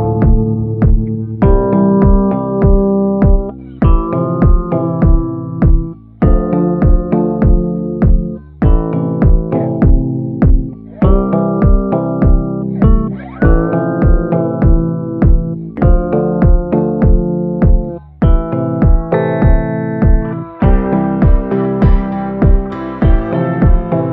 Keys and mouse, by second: 0.8 shift+middle click, 1.9 ctrl+i, 2.7-6.0 typing, 6.9 middle click, 7.7 b, 9.8 click, 10.8-11.3 ], 11.3-13.1 drag, 16.0 a, 17.0 middle click, 17.5-18.5 middle drag, 18.8 middle click, 19.5 shift+middle click, 19.7 shift+click, 20.5 click, 22.1-23.5 typing, 22.7 click, 23.6 click.